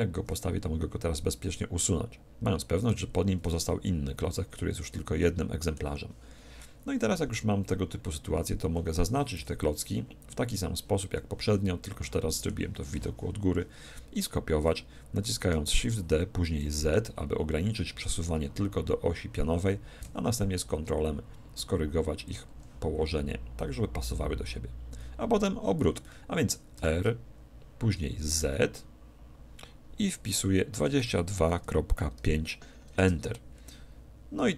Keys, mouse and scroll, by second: 0.6 x, 2.8-4.6 right drag, 3.4 g, 4.6-7.2 middle drag, 6.6 KP_1, 7.2 KP_7, 9.0 a, 9.4 b, 11.2-13.0 middle drag, 14.6-16.6 middle drag, 15.8 shift+d, 22.4-24.1 drag, 26.0-27.8 middle drag, 26.8 r.